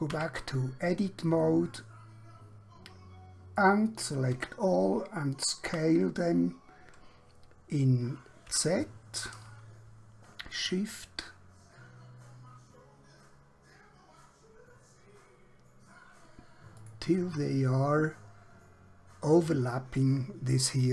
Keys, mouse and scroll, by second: 0.2 Tab, 1.5 middle click, 4.4 a, 5.7 typing, 8.6 z, 16.8 shift+click.